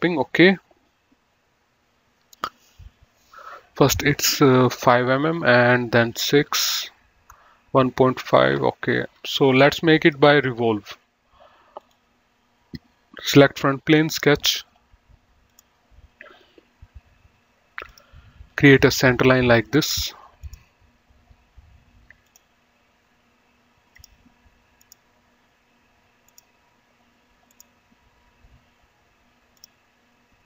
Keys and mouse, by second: 10.4 click, 12.0 click, 14.4 click, 15.8 click, 18.1 click, 20.0 click, 20.3 right click, 20.7 click, 22.5 click, 24.2 click, 26.4 click, 27.7 click, 29.8 click.